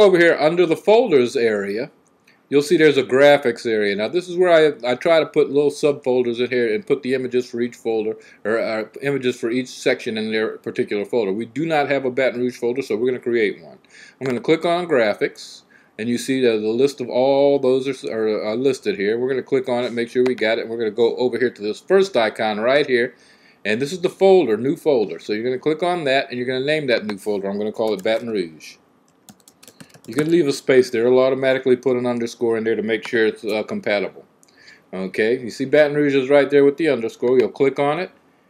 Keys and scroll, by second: 27.4-30.4 typing.